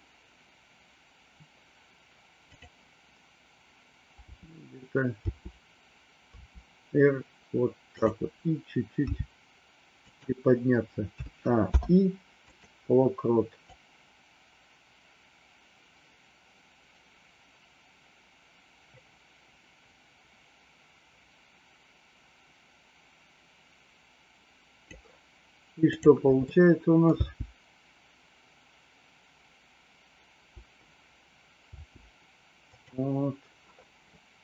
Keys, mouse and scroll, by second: 2.5 click, 5.1 t, 6.2 r, 9.0 g, 11.0 a, 11.7 i, 13.7-24.9 drag, 25.9 click, 26.4 middle click, 27.1 space, 31.7 space, 32.8 click.